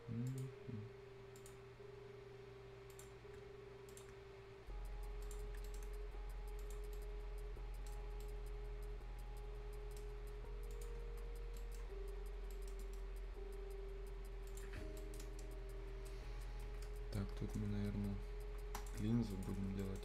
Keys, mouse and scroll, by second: 0.3 click, 1.7-2.1 scroll up 1, 2.9 click, 3.2 scroll down 1, 3.4 shift+scroll up 1, 3.9 shift+click, 5.2 click, 5.5 Escape, 5.7 right click, 5.7 right click, 6.6 click, 7.0-10.7 right drag, 10.7 click, 11.0 scroll down 1, 11.2 scroll up 1, 11.6 right click, 11.8 scroll down 1, 12.1-12.5 scroll up 1, 12.5 right click, 12.8 middle click, 13.0-14.5 scroll up 1, 14.5 click, 14.8 scroll down 1, 15.0 right click, 15.9-16.8 scroll down 1, 16.8 Return, 17.1-17.8 scroll up 1, 18.8 shift+click, 19.0 shift+scroll up 1, 19.3 click, 19.7 scroll down 1, 19.8 right click.